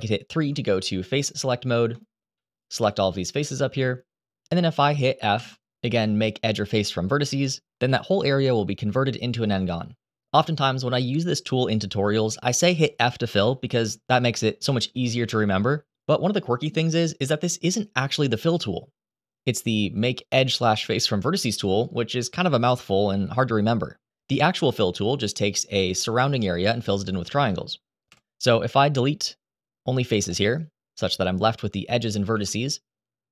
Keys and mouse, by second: 0.1 3, 2.3 shift+click, 2.6 shift+click, 3.0 shift+click, 5.1 f, 19.8-24.3 drag, 27.9 Delete, 32.0 1.